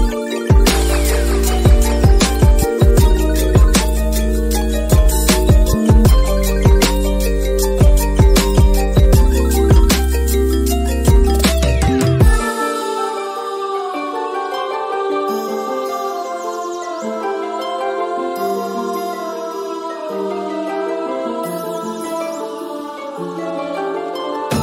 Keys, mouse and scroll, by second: 0.3 middle click, 1.4 click, 2.6 middle click, 2.7 middle click, 3.8 middle click, 4.4 middle click, 5.1 middle click, 5.3 middle click, 6.3 middle click, 6.4 click, 6.5 middle click, 6.6 click, 7.3 click, 8.3 click, 8.8 shift+click, 10.2 click, 11.0 click, 11.1 alt+click, 11.3 alt+shift+click, 11.4 alt+shift+click, 11.6 alt+shift+click, 12.4 click, 13.4 click, 13.5 click, 13.6 middle click, 15.3 middle click, 15.5 click, 15.6 middle click, 16.5 middle click, 16.8 click, 17.8-19.0 drag, 19.1 click, 20.0 click, 21.7-23.8 drag, 24.3 right click.